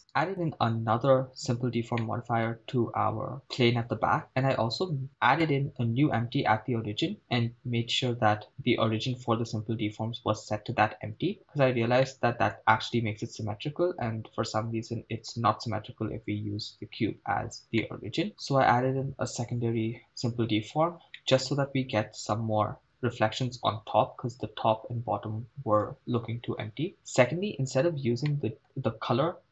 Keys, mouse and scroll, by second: 0.3-1.6 right drag, 2.1 middle click, 3.4 scroll up 3, 3.9 scroll down 1, 12.1-12.6 middle drag, 18.0 middle click, 21.3 middle click, 22.2 KP_0, 28.3 middle click.